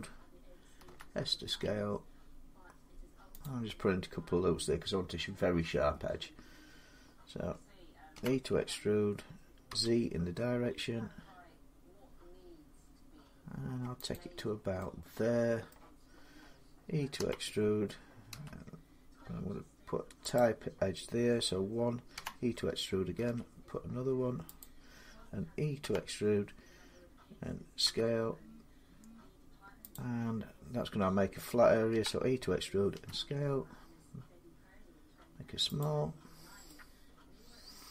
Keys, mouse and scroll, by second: 0.6 s, 2.3 click, 3.2-8.3 drag, 7.9 e, 9.5 z, 13.9-15.1 drag, 15.5 middle click, 17.0 e, 18.1 s, 20.1 click, 21.9 e, 23.0 s, 24.4 click, 25.6 e, 27.6 s, 29.4 click, 29.7-34.5 drag, 31.7 e, 32.7 s, 35.6 click, 36.2 scroll, 36.4 scroll down 2.